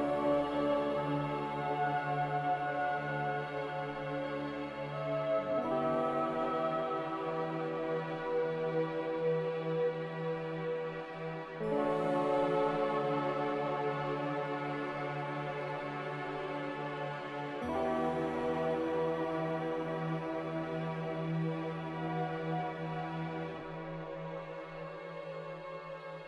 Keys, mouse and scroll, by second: 1.5-2.3 typing, 3.9 typing, 4.2 Return, 9.6 c.